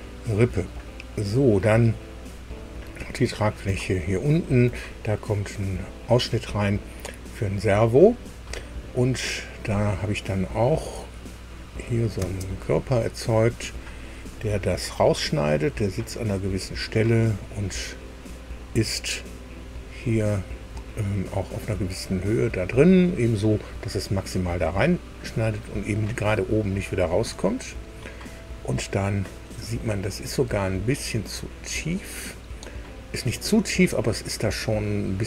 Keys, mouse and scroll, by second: 2.3-3.5 middle drag, 3.8 shift+click, 11.6 click, 12.2 space, 13.4 scroll up 2, 19.1 click, 26.8-29.7 middle drag, 30.1-30.8 scroll up 2, 31.4-32.9 middle drag, 32.9-34.5 drag, 34.7-35.1 scroll down 1.